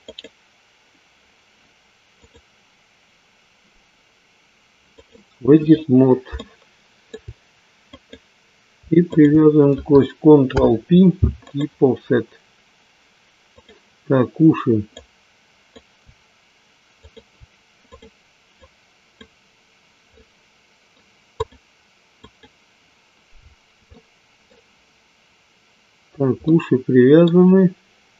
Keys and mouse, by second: 2.0-5.2 drag, 6.3-7.3 shift+middle drag, 8.0-10.2 drag, 10.4 ctrl+p, 14.9 click, 16.9 shift+click, 18.0 click, 18.6 click, 20.2 middle click, 21.3 click, 22.2 click, 23.9-25.2 middle drag, 26.4 middle click.